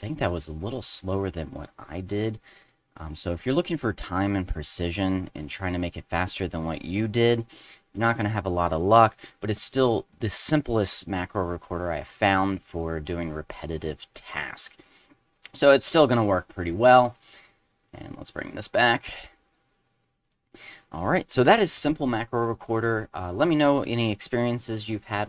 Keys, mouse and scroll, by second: 17.1 click, 17.9-18.9 drag, 20.2 click, 20.6 click.